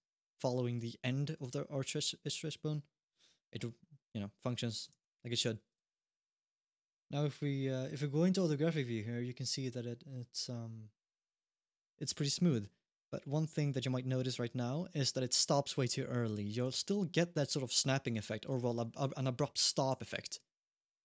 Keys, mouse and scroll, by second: 0.5 click, 1.2 click, 1.8 click, 2.4-2.8 scroll down 1, 2.8 middle click, 3.1 g, 4.7 alt+g, 5.5 click, 5.9-6.2 scroll up 1, 7.0 scroll up 1, 7.6 scroll down 1, 7.8 shift+middle click, 9.2 g, 16.1 alt+g, 19.7 g, 20.9 middle click.